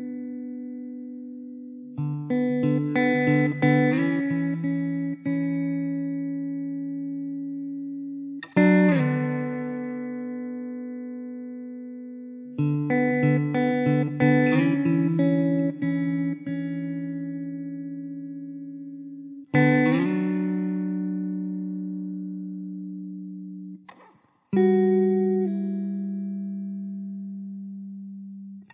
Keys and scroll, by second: 0.7 e, 1.3 s, 5.4 ctrl+r, 11.1 r, 20.2 s, 20.7 e, 21.3 s, 21.8 `, 27.0 `.